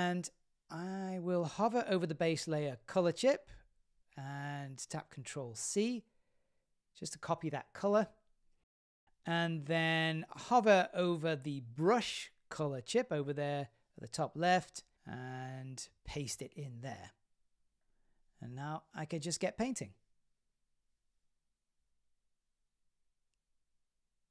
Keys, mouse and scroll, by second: 5.4 ctrl+c, 16.4 ctrl+v, 18.2 click, 20.8 click, 21.1 shift+middle click, 21.3 middle click, 21.9 click, 22.5 shift+middle click, 22.9 click, 23.0 click, 23.1 click, 23.8 click, 24.0 middle click.